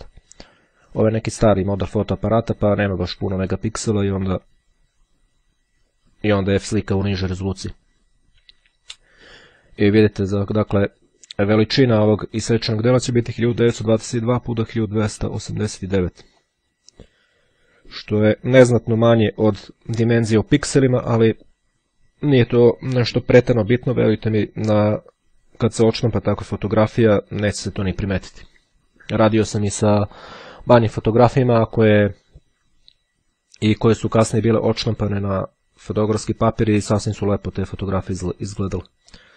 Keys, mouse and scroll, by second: 16.1-17.2 drag, 35.5-36.7 drag, 39.1-39.3 drag.